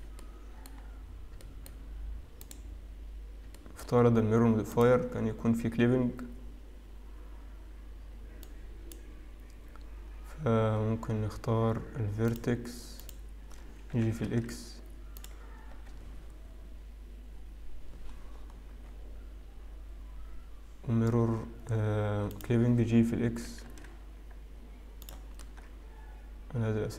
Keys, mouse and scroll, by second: 0.0 shift+middle click, 0.4 middle click, 1.2-1.7 scroll up 4, 1.7 shift+middle click, 2.6 click, 4.2 shift+middle click, 4.9 click, 12.5 click, 14.8 click, 14.8 g, 18.3-22.1 scroll down 1, 22.5 click, 24.1 g, 26.4 middle click.